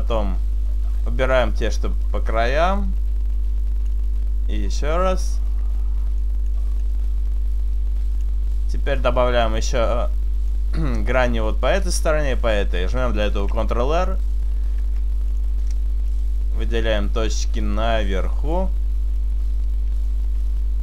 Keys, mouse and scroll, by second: 0.6 shift+right click, 1.5 shift+right click, 2.8 click, 4.7 shift+right click, 5.5 shift+right click, 6.3 click, 6.9 click, 9.1 click, 9.9 middle click, 13.4 ctrl+r, 14.3 right click, 14.8 ctrl+r, 15.7 right click, 16.4 right click, 17.6 shift+right click, 18.1 shift+right click, 19.2 shift+right click, 20.1 shift+right click, 20.5 shift+right click.